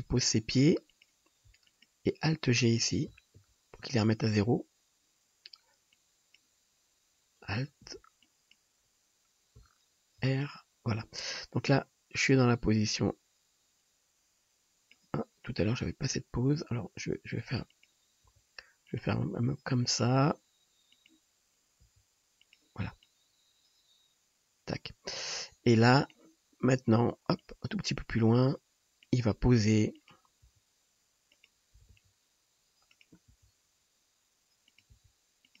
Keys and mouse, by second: 1.7 shift+click, 3.1-10.3 alt+drag, 3.4 alt+g, 5.9-10.3 middle drag, 5.9-10.3 right drag, 10.3 alt+r, 15.8-17.7 drag, 17.9-23.1 drag, 18.2 g, 19.3 r, 20.2 g, 21.9 r, 30.2-35.6 drag, 30.6 r, 31.8 r, 33.3 g, 35.0 r.